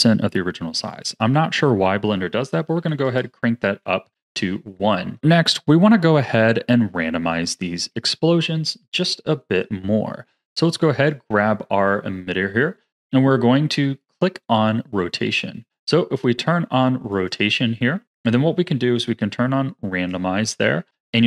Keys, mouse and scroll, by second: 0.8-3.9 drag, 4.1 scroll down 1, 4.3 middle click, 5.2 scroll down 5, 5.6-10.5 middle drag, 11.0 click, 12.9-13.4 drag, 15.6 click, 17.1-20.9 drag.